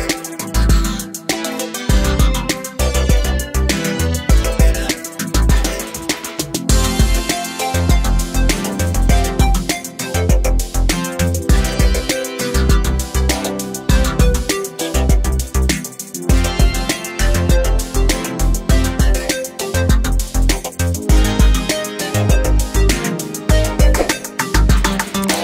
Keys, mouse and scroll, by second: 0.5 click, 2.7 Page_Down, 3.4 Page_Up, 4.1 Page_Down, 5.1 scroll up 1, 5.6 scroll down 1, 6.0 scroll up 1, 6.8 scroll down 1, 7.3 scroll up 1, 8.6 scroll down 1, 9.0 scroll up 1, 9.7 click, 11.0 ctrl+o, 12.6 click, 13.4 click, 15.1 click, 16.2 click, 17.7 Page_Down, 18.9 Page_Down, 20.5 click, 22.4 ctrl+o, 23.0 click, 24.0 click.